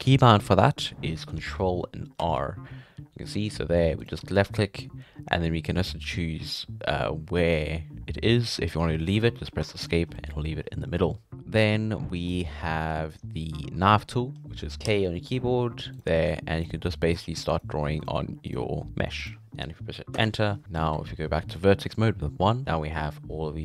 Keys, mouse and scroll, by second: 0.0-0.6 middle drag, 0.6-2.2 drag, 2.2 ctrl+r, 10.1 middle click, 10.3-11.0 scroll up 2, 11.0 scroll down 4, 11.3-13.8 middle drag, 14.3 scroll up 2, 14.7 middle click, 14.8 k, 20.4 middle click, 20.9 1, 22.6-23.6 middle drag.